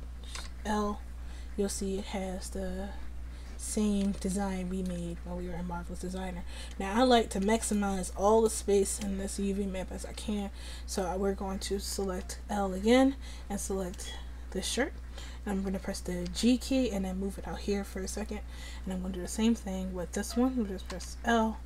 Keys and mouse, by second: 0.5 l, 2.3-3.6 drag, 3.8-12.6 drag, 12.6 l, 16.3 g, 21.0 l.